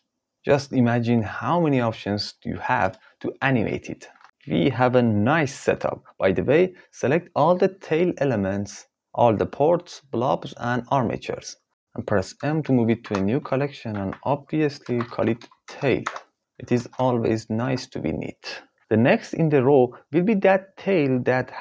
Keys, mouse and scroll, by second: 1.1 g, 8.9 click, 10.7 shift+click, 12.4 m, 17.0 ctrl+s, 17.6 alt+a.